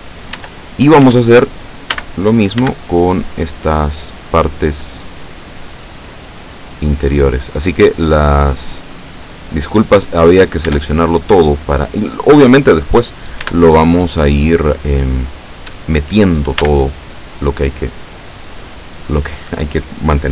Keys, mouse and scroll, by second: 0.4 Tab, 1.1 Tab, 2.0 a, 2.6 b, 3.4-5.3 drag, 6.1-10.3 drag, 10.7 Tab, 13.5 Tab, 16.7 a.